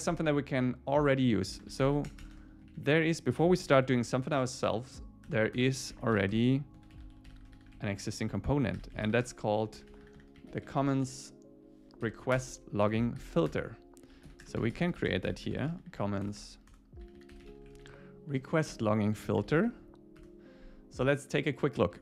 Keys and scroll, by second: 1.8 alt+8, 2.1 Return, 2.6 Up, 3.1 Down, 3.6 alt+l, 5.3 Return, 12.1 Down, 12.4 Return, 13.2 alt+8, 13.5 Return, 18.7 Return, 20.1 Return.